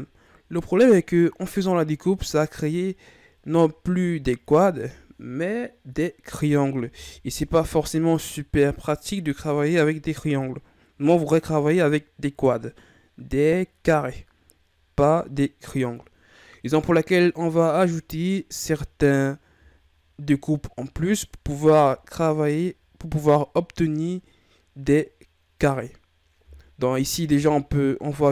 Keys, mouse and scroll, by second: 0.9-4.1 scroll up 4, 19.3-19.9 scroll up 1, 19.9-21.4 shift+scroll up 2, 21.4 ctrl+scroll up 1, 27.3 k.